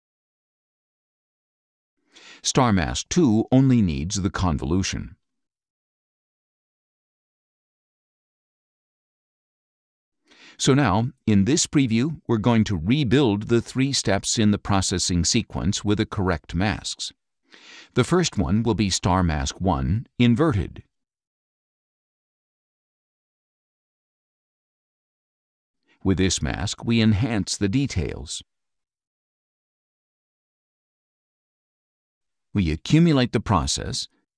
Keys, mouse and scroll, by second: 0.4-1.4 drag, 4.1 click, 5.3-6.7 drag, 9.5 click, 11.3 click, 17.8 click, 21.0 click, 22.5 click, 24.2 click, 25.4 click, 28.5 click, 33.5 click.